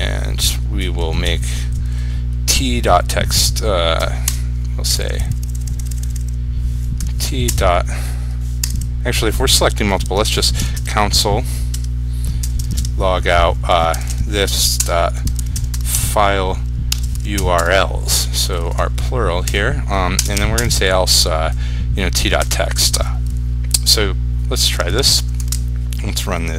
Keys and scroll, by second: 24.9 ctrl+s, 25.6 ctrl+r.